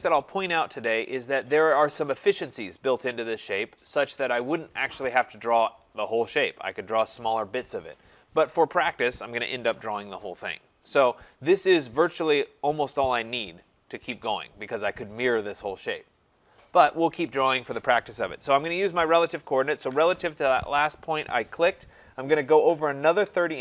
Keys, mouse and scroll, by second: 19.3 click, 19.8 typing, 22.9-23.6 typing.